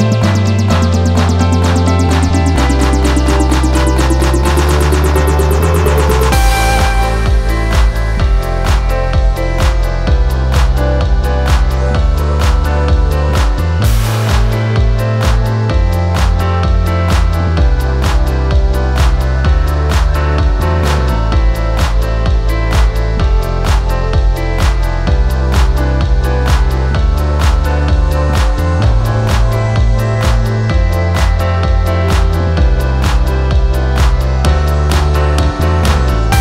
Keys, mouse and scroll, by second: 1.5 ctrl+t, 17.3 ctrl+j, 29.3 ctrl+j.